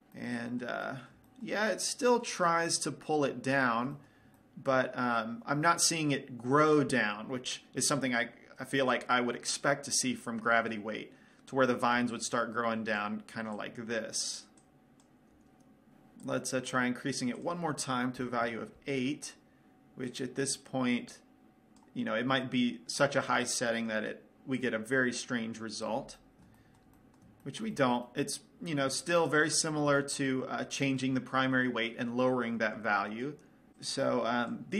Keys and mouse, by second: 0.7-10.2 middle drag, 12.5 middle click, 12.5 d, 12.7-16.1 drag, 13.5-15.7 typing, 16.8-19.7 drag, 20.6-22.5 drag, 26.1-27.1 drag, 27.3 middle click, 28.6 middle click, 28.8 middle click, 29.0 click, 29.7-33.9 middle drag, 34.3-34.7 drag.